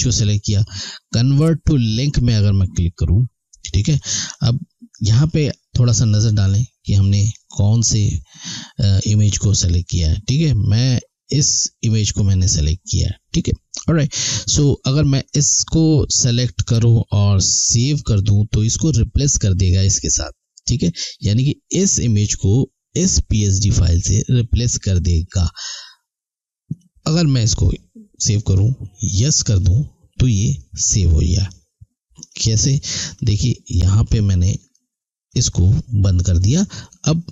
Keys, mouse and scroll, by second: 2.1 click, 5.3 click, 11.0 click, 15.3 click, 26.7 click, 32.2 click.